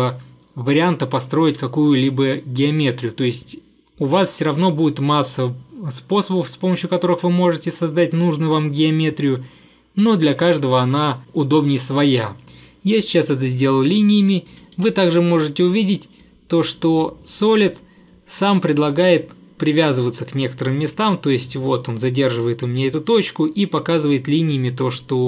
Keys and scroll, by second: 14.8 Delete.